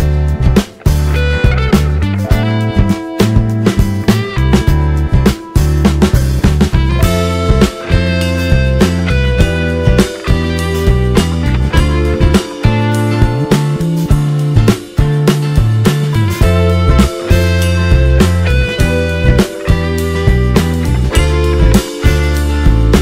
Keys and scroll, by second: 5.8 ctrl+t, 12.1 d, 19.2 space.